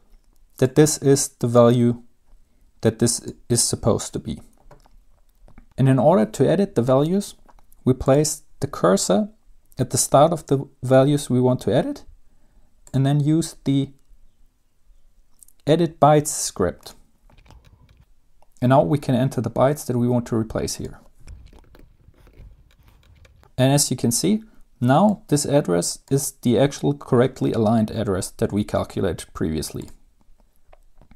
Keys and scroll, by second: 21.7-23.7 typing.